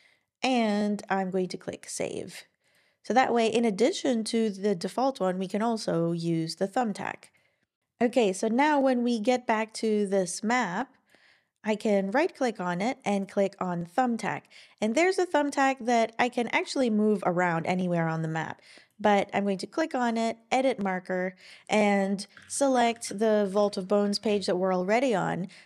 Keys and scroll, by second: 22.1-23.4 typing.